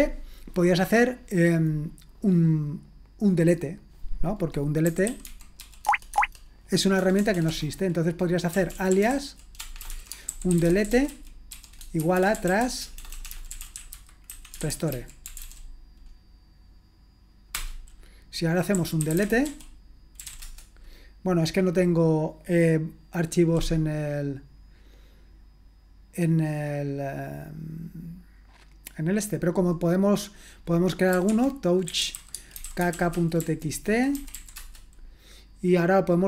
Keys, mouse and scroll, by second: 4.6-15.9 typing, 6.1 Tab, 17.5 Return, 18.5-20.9 typing, 30.9-34.8 typing.